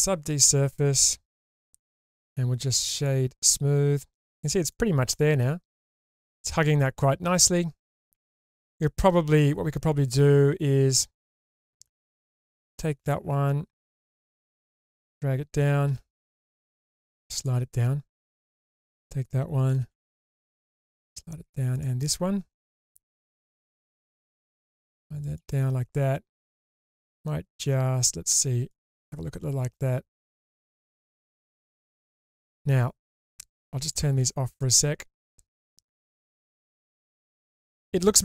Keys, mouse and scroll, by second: 1.3 Tab, 1.9-3.1 right drag, 4.4 scroll down 1, 4.7-7.8 middle drag, 8.2 Tab, 8.8-9.8 scroll up 1, 9.8-11.2 scroll up 2, 12.4 alt+click, 15.8 g, 16.0 g, 17.3 click, 18.4 alt+click, 19.7 g, 19.8 g, 20.7 click, 21.7 alt+click, 23.6 g, 23.6 g, 25.2 click, 28.7 click, 29.8-32.4 middle drag, 33.8 click, 34.2 click, 36.0-38.0 middle drag.